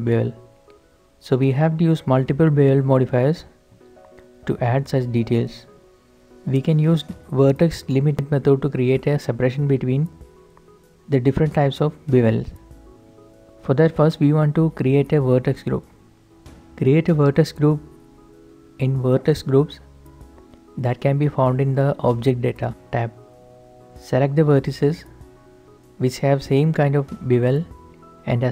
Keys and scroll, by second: 0.2 ctrl+s, 0.3 alt+h, 24.0 Tab, 26.3 z.